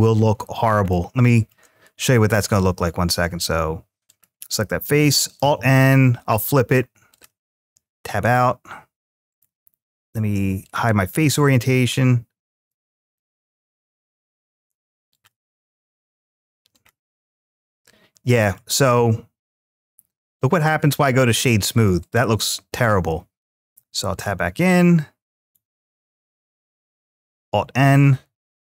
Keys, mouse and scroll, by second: 0.0 scroll up 2, 0.6 shift+scroll up 1, 0.7-1.3 shift+middle drag, 2.4 Tab, 3.8 click, 5.2 alt+n, 6.9 click, 7.3 Tab, 9.1-12.3 drag, 12.9-13.8 middle drag, 14.9 click, 15.9 right click, 17.1-18.4 middle drag, 19.4 click, 20.1-20.8 middle drag, 21.8 click, 23.5 Tab, 23.9 click, 25.2 right click, 26.4 click.